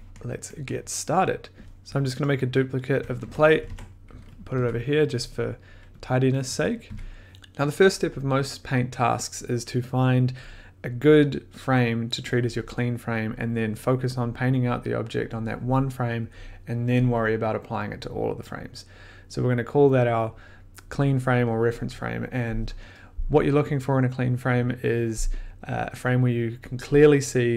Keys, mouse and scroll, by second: 0.6 middle click, 1.6 ctrl+v, 1.6 click, 1.6 1, 1.6 BackSpace, 2.1 click, 3.1 ctrl+c, 3.5 click, 3.7 ctrl+v, 4.4 click, 4.5 1, 6.2 click, 6.8 click, 6.8 1.